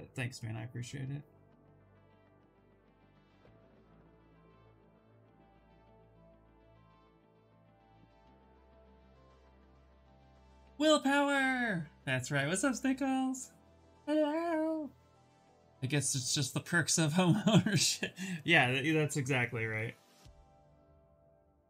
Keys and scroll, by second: 2.7 ctrl+z, 2.9 ctrl+z, 3.1 s.